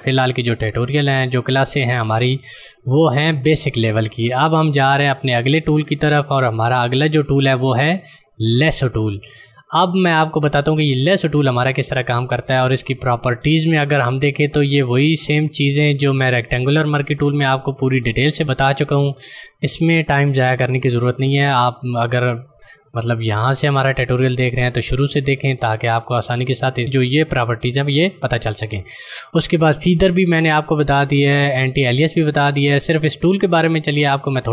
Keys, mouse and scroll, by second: 6.7 click, 33.2 click.